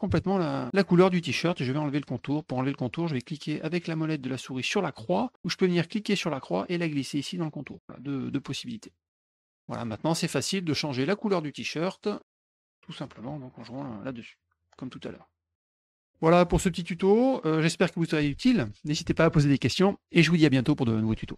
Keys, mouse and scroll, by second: 5.9-7.6 drag, 9.5 middle click, 11.9 click, 13.2 click, 14.0-15.7 drag, 15.9 middle click.